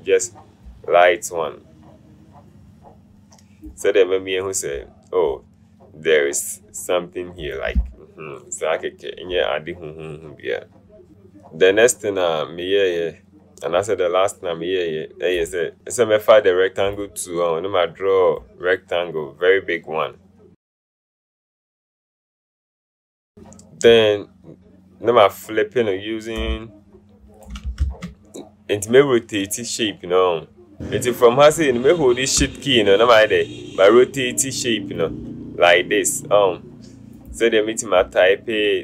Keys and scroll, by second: 27.9 ctrl+shift+z.